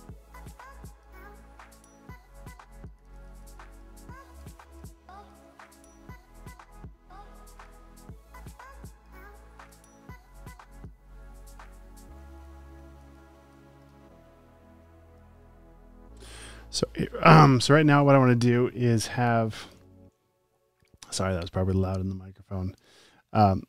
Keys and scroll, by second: 0.0-1.0 typing, 3.0 space, 3.5 alt+super+space, 4.3-4.8 typing, 5.7 shift+super+[, 11.7 x, 12.8 v, 12.9 space, 13.5 super+space, 13.6 v, 18.9-19.7 typing, 19.4 super+space, 23.5 space.